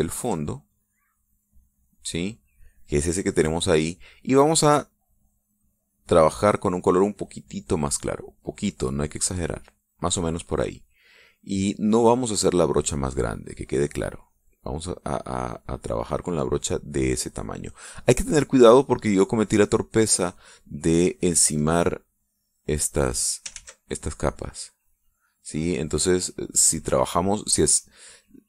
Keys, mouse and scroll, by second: 0.8 ctrl+click, 6.8-9.2 drag, 9.6 click, 10.1 middle click, 10.1 click, 10.8-12.0 middle drag, 12.6-18.7 drag, 18.7 middle click, 19.8-21.2 drag, 21.6-24.4 drag, 24.5 ctrl+z, 25.2-26.2 drag, 26.6-28.4 drag.